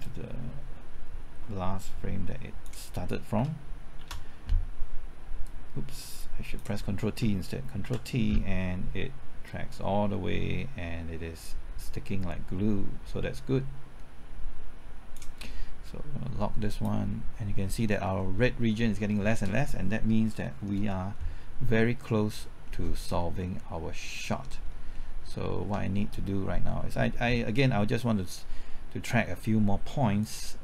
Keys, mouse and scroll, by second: 0.0-2.7 drag, 4.2 ctrl+shift+t, 5.4-6.7 drag, 7.8 ctrl+t, 9.4-17.7 drag, 17.8 scroll down 1, 18.1 middle click, 19.9-20.4 scroll down 1, 20.4 middle click, 22.2-22.6 scroll down 1, 22.6 middle click, 23.0-23.3 scroll up 1, 23.3 middle click, 24.6-24.9 scroll down 1, 24.9 middle click, 30.2-30.6 drag.